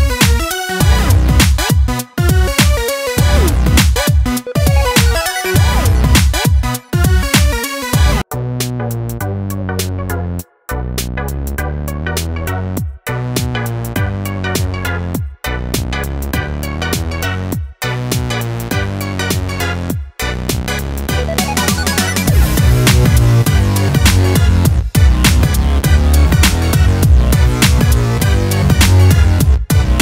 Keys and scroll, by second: 13.6 ctrl+t.